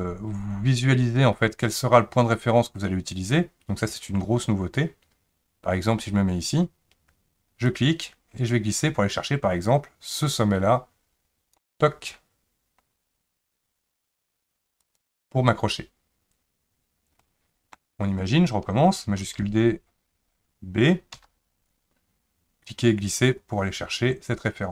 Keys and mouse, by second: 17.3-17.8 middle drag, 19.2 shift+d.